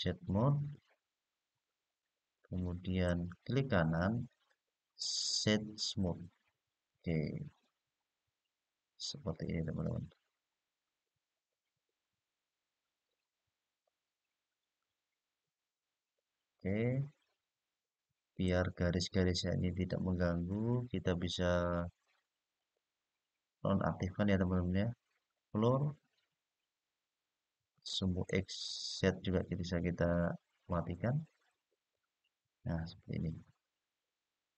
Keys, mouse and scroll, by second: 0.4-2.1 middle drag, 2.8-6.3 right drag, 7.3-18.2 middle drag, 19.4-19.9 scroll down 4, 19.9-22.3 scroll up 4, 22.3-31.6 drag, 32.9-34.5 middle drag.